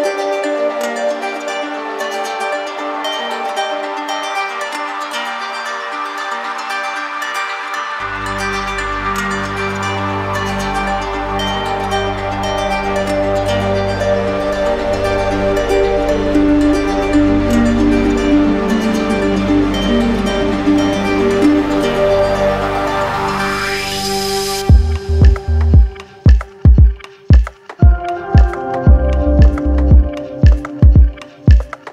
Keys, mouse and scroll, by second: 1.7 click, 10.3 click, 11.4 ctrl+shift+a, 12.2 click, 15.9 click, 17.9 click, 18.7 click, 19.6-20.7 typing, 21.8-22.9 drag, 22.4-23.6 typing, 24.1 Return, 25.8-26.9 drag, 27.1-28.2 drag, 28.8-30.7 drag, 29.6 ctrl+n, 31.4-31.9 drag.